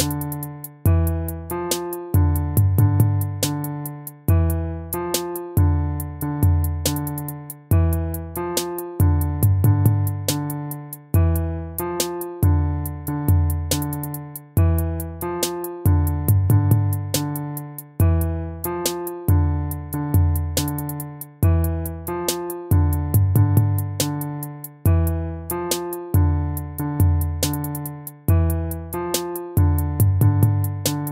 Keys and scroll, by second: 3.1 ctrl++, 4.1 BackSpace, 5.2 ctrl+z, 15.7 ctrl+-, 16.4 ctrl+-, 22.8 ctrl+-, 24.9 ctrl++.